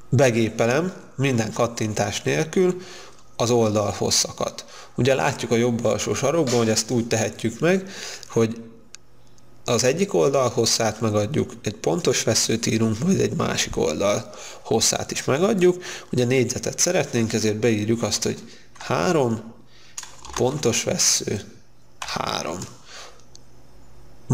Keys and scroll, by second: 19.4 3, 22.6 3.